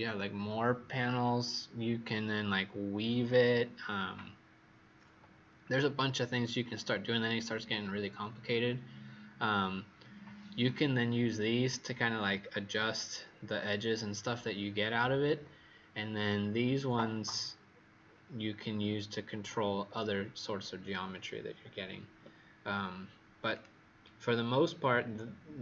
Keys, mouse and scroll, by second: 24.9-25.6 scroll down 4.